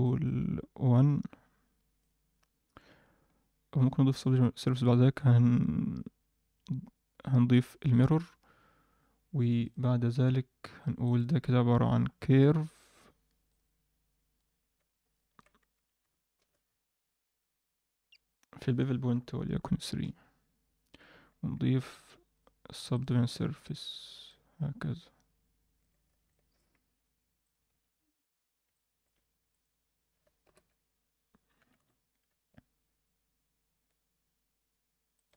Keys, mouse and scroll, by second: 0.0 middle click, 1.9 click, 4.1 click, 5.0 ctrl+a, 9.6-10.9 drag, 11.0-14.1 right drag, 14.3 drag, 15.1-16.4 shift+drag, 16.6-16.9 scroll down 1, 17.4-18.1 scroll down 4, 18.3-19.9 drag, 22.3 drag, 22.7 click, 22.9-23.7 drag, 24.2-25.8 alt+middle drag, 26.1 alt+a, 26.2 alt+middle drag, 26.8-27.3 scroll up 1, 27.4 click, 27.6 Tab, 28.7 middle click, 29.4 click, 30.4 ctrl+l, 31.5 g.